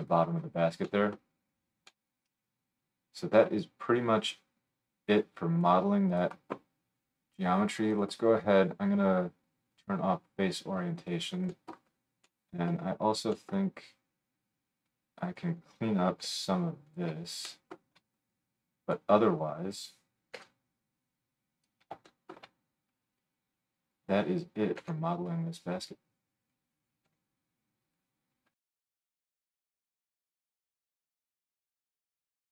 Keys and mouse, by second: 6.2-8.0 drag, 8.0-13.1 middle drag, 13.3 middle click, 13.6-17.0 middle drag, 16.2 g, 17.0-18.3 drag, 18.3-21.7 middle drag, 21.6 click, 21.6 right click, 22.1 shift+click, 22.2 shift+right click, 22.3 shift+click, 22.4-28.5 right drag, 23.2-26.1 drag, 23.2-26.1 middle drag, 24.8 g, 26.5-28.0 drag, 26.5-28.0 middle drag, 27.1 g, 28.8 right click, 29.6-32.5 drag.